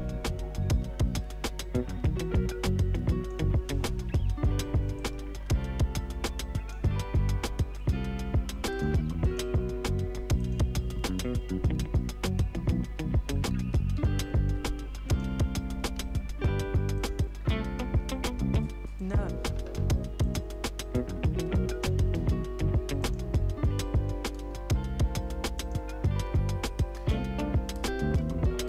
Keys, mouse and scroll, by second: 0.7-4.1 drag, 4.1 y, 5.0-7.7 drag, 7.7 click, 10.9 r, 12.9 ctrl+d, 15.0 shift+click, 15.9 r, 17.0 click, 17.3-18.3 scroll down 1, 19.0 click, 25.5 click.